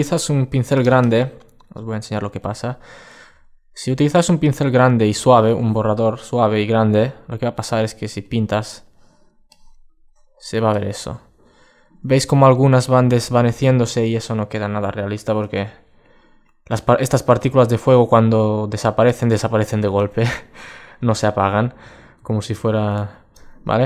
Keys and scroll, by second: 14.6 super+2, 21.0 alt+super+z, 21.6 alt+super+z, 22.4 alt+super+z, 23.7 super+space.